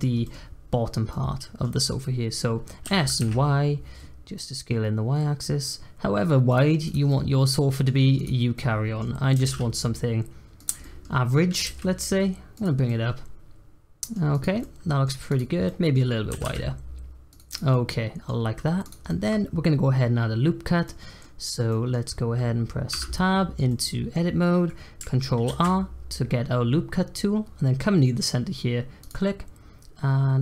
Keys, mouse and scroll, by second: 0.2-2.8 middle drag, 2.8 s, 6.8 click, 7.0-8.1 middle drag, 8.1 click, 8.5-9.3 middle drag, 9.3 s, 10.8 middle click, 11.5 g, 12.8-14.3 middle drag, 14.3 click, 14.6-15.2 middle drag, 15.2 click, 15.6 middle click, 16.3 s, 17.5 click, 17.7 middle click, 18.6 scroll up 1, 18.8 click, 19.0-22.9 middle drag, 22.9 Tab, 23.6-25.5 middle drag, 25.5 ctrl+r.